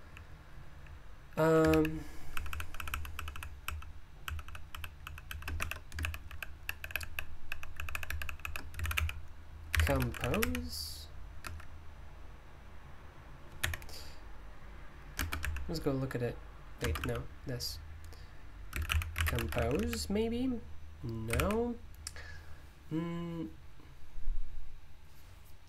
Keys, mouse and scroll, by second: 0.0-25.6 typing, 11.4 Escape.